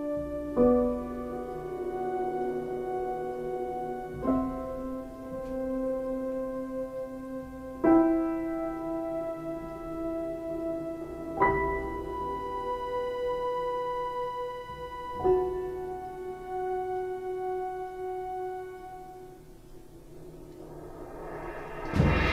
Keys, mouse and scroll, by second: 2.0 ctrl+z, 7.0 ctrl+space, 9.9 ctrl+z.